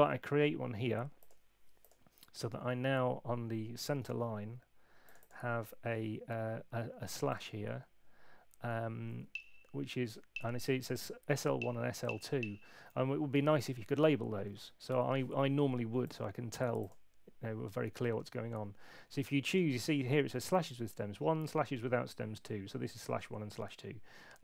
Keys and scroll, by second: 7.8 Right, 13.6 Escape, 14.4 super+1.